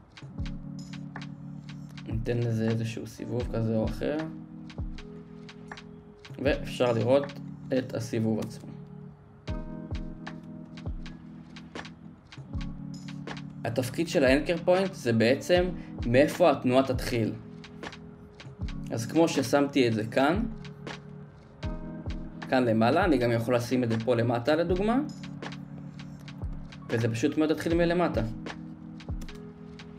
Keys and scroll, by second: 9.4 space, 11.4 space, 27.5 space.